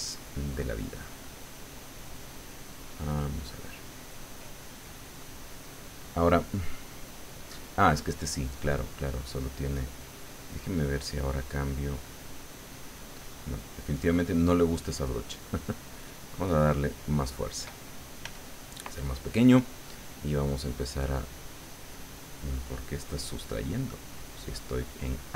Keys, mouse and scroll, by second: 9.7 click, 10.5 click, 11.1-13.2 drag, 13.9 click, 15.0 click, 16.3 click, 18.2 f, 18.6 click, 19.3-21.1 drag, 22.5-24.8 middle drag, 24.8-25.3 middle drag.